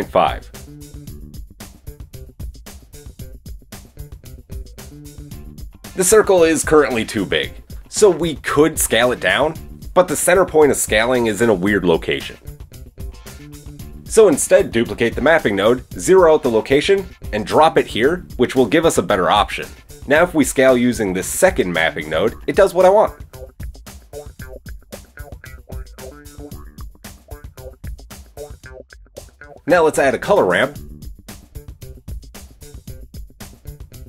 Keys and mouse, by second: 12.1 middle click, 12.4 click, 13.2 middle click, 13.9 click, 14.7-16.2 shift+middle drag, 15.1 shift+d, 16.2-29.4 drag, 29.7 shift+a, 32.9-34.0 middle drag.